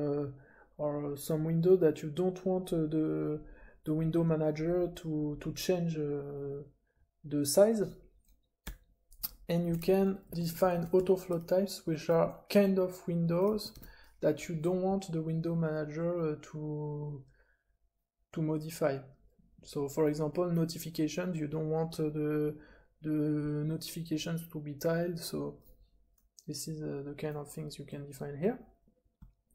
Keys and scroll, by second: 8.6-13.4 typing, 29.1-29.5 typing.